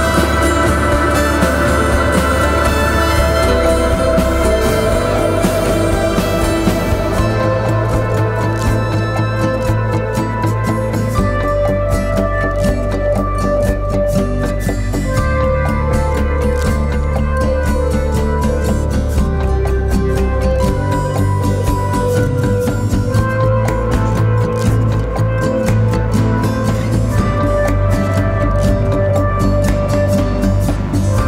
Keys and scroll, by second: 3.0 F9, 12.3 -, 12.6 Return, 12.9 3, 13.1 Return, 17.1 ctrl+z, 18.4 ., 19.4 ,, 20.8 -, 21.2 Return, 21.5 5, 21.5 Return, 24.5 ctrl+z, 25.7 -, 25.9 Return, 26.1 2, 26.2 Return, 27.9 -, 28.1 Return, 28.3 2, 28.4 Return, 30.3 -, 30.5 2, 30.5 Return, 30.7 2, 30.8 Return.